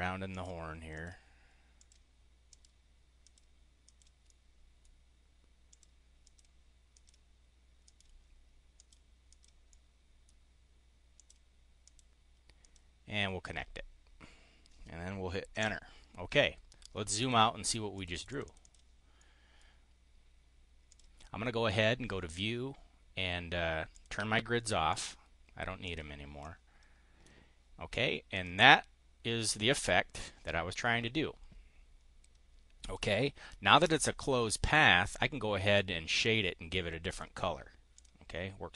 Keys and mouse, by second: 0.2 click, 0.8 click, 1.7 click, 2.5 click, 3.1 click, 3.7 click, 4.2 click, 5.4 click, 6.1 click, 6.8 click, 7.8 click, 8.7 drag, 9.2 click, 9.7 click, 11.0 click, 11.7 click, 12.5 click, 15.4 Return, 17.1 click, 17.9 click, 18.2 click, 18.5 click, 19.0 click, 20.8 click, 21.6 click, 23.8 click, 24.8 click, 25.8 click, 26.2 click, 28.2 click, 32.7 click, 37.0 click, 37.8 click.